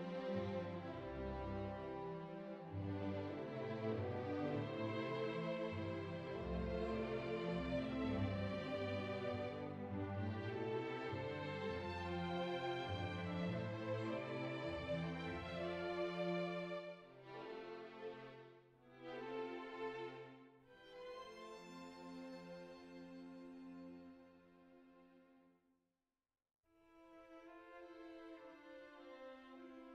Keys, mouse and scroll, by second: 1.2 shift+middle click, 1.4 middle click, 1.7 shift+middle click, 2.0 click, 2.8 g, 3.6 click, 4.0 z, 4.5 alt+z, 4.7 click, 5.2 alt+z, 5.4 r, 6.1 alt+z, 6.4 click, 6.9 middle click, 7.3 alt+z, 7.6 r, 8.8 click, 9.1 middle click, 9.6 alt+z, 10.0 click, 10.5 middle click, 11.3 g, 12.4 middle click, 13.3 click, 13.9 g, 15.5 middle click, 16.2 click, 16.9 shift+middle click, 17.2 middle click, 17.8 r, 17.9 z, 19.6 KP_3, 20.3 r, 22.4 middle click, 23.1 middle click, 23.6 shift+middle click, 24.3 click, 25.0 g, 27.2 shift+middle click, 27.8 click, 28.3 g, 29.3 right click, 29.6 click.